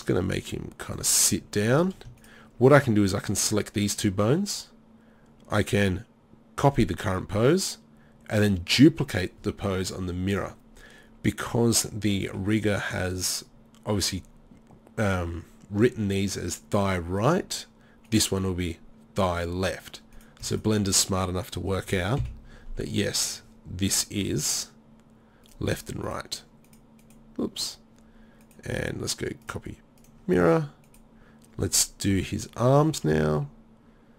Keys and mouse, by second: 0.2 r, 11.9-12.3 middle drag, 18.1-20.2 right drag, 22.2 KP_7, 22.5-23.2 middle drag, 24.3 r, 30.8 click, 32.1 KP_3, 33.1 r.